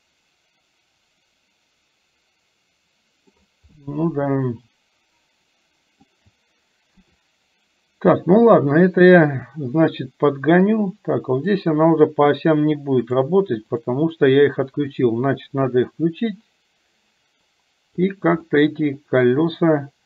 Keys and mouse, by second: 3.9-6.1 middle drag, 7.0 KP_7, 9.0-11.6 drag, 13.1 click, 15.5-18.1 drag, 18.5-20.0 middle drag.